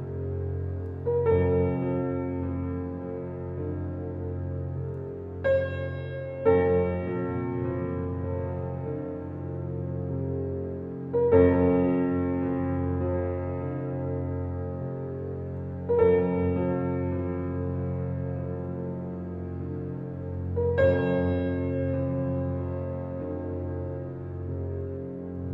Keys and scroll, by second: 0.3 g, 9.3 s, 14.9 s, 25.3 space.